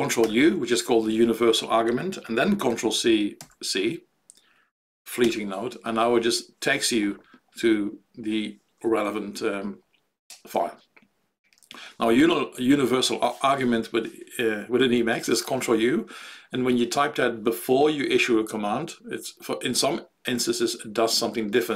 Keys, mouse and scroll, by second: 0.2 ctrl+u.